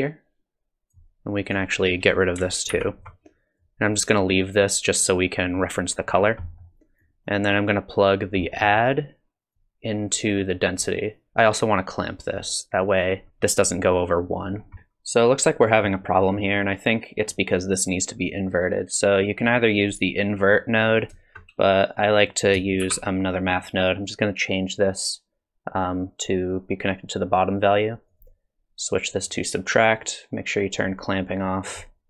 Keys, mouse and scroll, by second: 1.5 click, 2.7 ctrl+x, 3.6 click, 6.1-6.7 scroll up 4, 6.4 middle click, 7.0 click, 8.4 middle click, 9.5 click, 12.4 click, 14.5 scroll up 1, 14.7 click, 14.7 middle click, 16.2 middle click, 20.9 click, 21.9 click, 22.8 shift+d, 24.8 click, 27.3 click, 30.5 click, 30.8 click, 31.7 click.